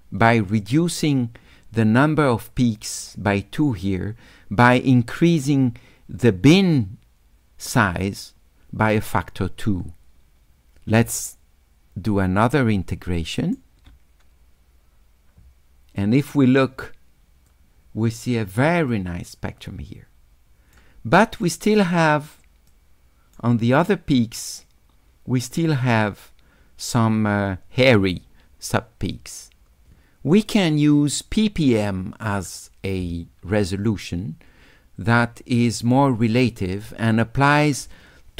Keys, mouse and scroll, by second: 11.1 s, 11.2-13.6 drag, 16.4-17.5 drag, 18.9-20.8 right drag, 21.5 click, 22.7 click, 30.4 click, 32.3 click.